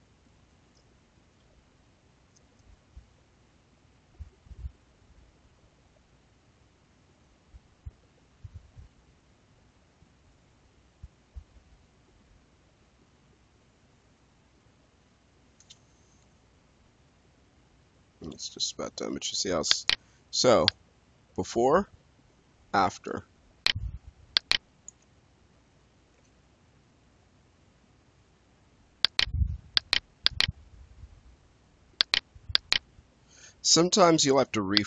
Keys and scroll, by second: 24.8 Escape, 26.1 space.